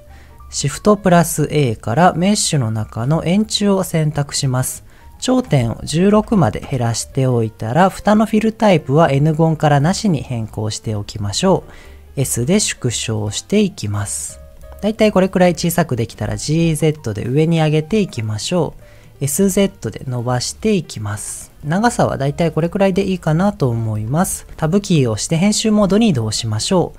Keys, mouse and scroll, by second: 1.0 shift+a, 5.2-6.7 drag, 8.8-9.8 drag, 10.5-11.5 scroll up 2, 12.2 s, 14.1 click, 14.5 middle click, 15.1 middle click, 16.2 g, 16.4 z, 18.3 click, 18.7 middle click, 19.4 s, 19.5 z, 21.3 click, 21.6-22.7 shift+middle drag, 23.0 middle click, 23.5-24.2 scroll up 2, 24.5 Tab, 26.0 middle click.